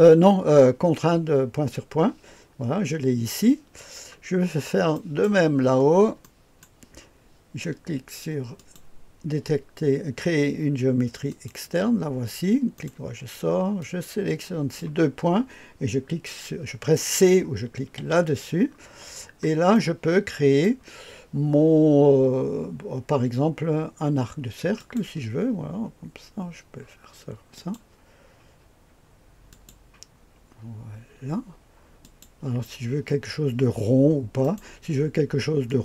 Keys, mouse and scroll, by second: 3.7-4.9 scroll down 2, 4.9 right click, 5.7-6.6 scroll up 2, 6.2-6.6 right drag, 8.5 click, 11.3 click, 12.7 right click, 13.8-14.8 drag, 18.0 c, 18.6-19.7 scroll down 1, 19.7-20.6 right drag, 24.8 click, 27.5 click, 29.5 click, 32.0 click, 34.4 right click, 35.6 click.